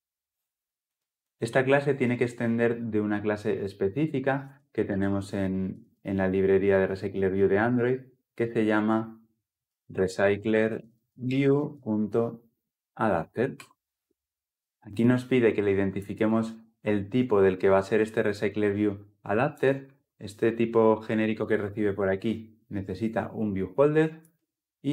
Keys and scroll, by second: 12.7 alt+Return, 13.3 Return, 21.8 ctrl+p.